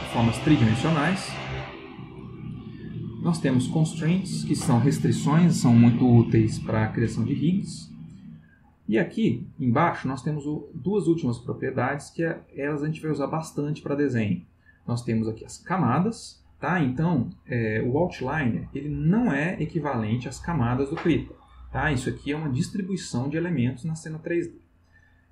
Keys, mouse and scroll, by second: 1.7 click, 8.3 click.